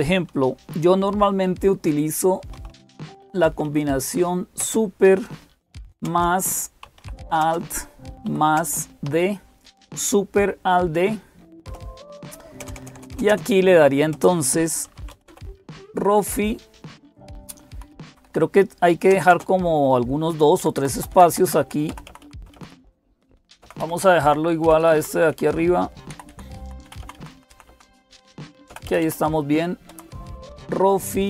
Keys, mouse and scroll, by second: 0.0-31.2 typing, 21.0 Left, 21.7 Left, 21.9 Left, 22.2 Right, 24.1-24.6 Right, 25.9 Up, 26.1-26.7 Up, 26.7 Left, 26.8 Left, 27.0 Left, 27.2 Down, 28.5 Down, 28.7 Down, 28.9 Down, 29.7 Down.